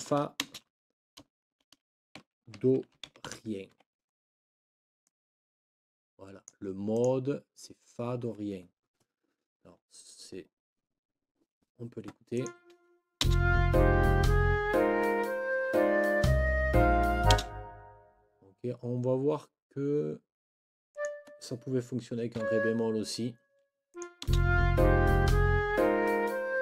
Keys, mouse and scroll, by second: 0.0 shift+f, 0.4 shift+space, 1.9-3.8 typing, 5.0-6.7 drag, 6.9 click, 12.3 click, 13.2 space, 17.3 space, 20.9 click, 22.3 Down, 23.9 click, 24.3 space.